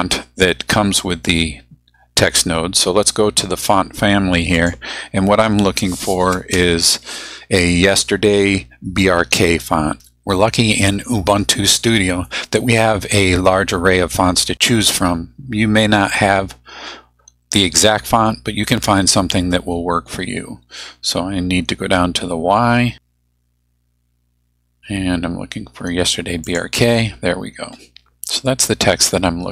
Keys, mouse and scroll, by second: 4.5 click, 21.2-21.5 scroll down 1, 22.8 scroll down 1, 26.5 click.